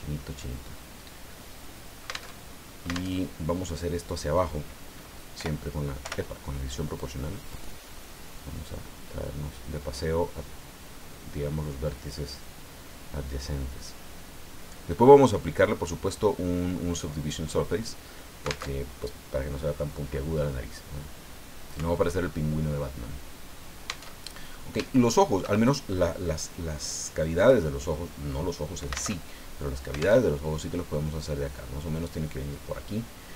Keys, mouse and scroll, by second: 0.2-2.3 middle drag, 2.3 alt+Tab, 3.1 alt+Tab, 5.4 o, 6.0 o, 7.0 click, 7.7 scroll down 2, 8.3-8.8 scroll down 4, 12.4-17.3 drag, 18.6 alt+Tab, 24.1 alt+Tab, 24.8 shift+click, 27.4 click, 29.1 alt+Tab, 30.2 alt+Tab.